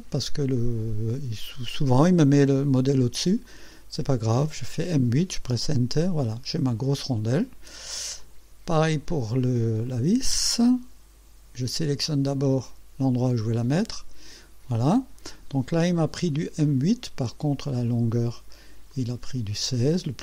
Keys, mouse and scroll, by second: 0.6 click, 3.0 click, 3.5 click, 4.5 click, 5.6 Return, 6.4-8.0 drag, 8.2 click, 9.9 click, 13.8 click, 15.5 scroll down 1, 16.7 click, 18.4 click, 19.0 click.